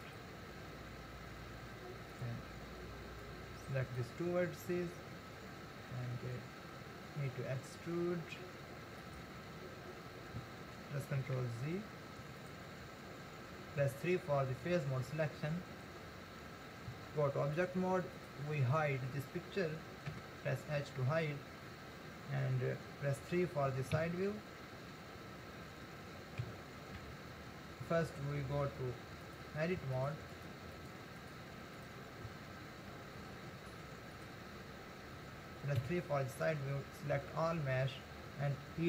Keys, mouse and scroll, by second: 3.2 click, 7.5 e, 11.2 ctrl+z, 12.4 click, 13.9 3, 14.5-16.9 scroll down 1, 16.9 Tab, 18.2 click, 20.1 h, 24.0 KP_3, 26.4 KP_1, 27.0 Tab, 31.8 click, 32.3 Tab, 33.2 Tab, 35.8 KP_3, 37.1 a.